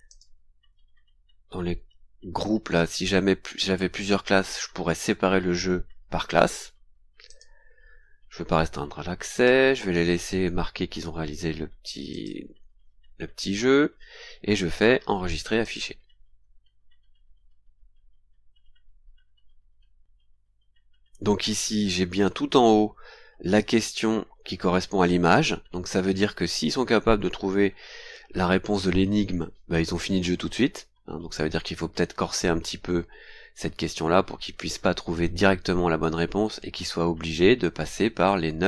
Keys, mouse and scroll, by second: 0.1 click, 7.3 click, 7.8 scroll down 1, 9.3 click, 12.1 click, 15.6 click, 22.2-22.5 scroll down 2, 36.3-36.7 scroll down 2, 36.9 scroll down 2, 37.7-38.6 scroll down 4.